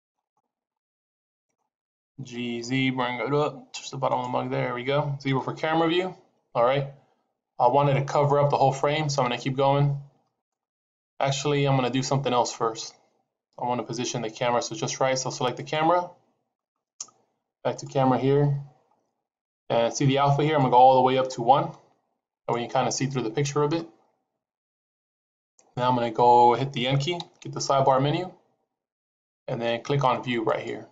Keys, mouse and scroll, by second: 0.7 shift+middle click, 2.2 g, 4.4-5.1 scroll down 2, 5.1 KP_0, 9.2 s, 15.4 click, 17.6 click, 18.4-20.5 scroll down 7, 20.5 click, 27.1 n, 30.4 click.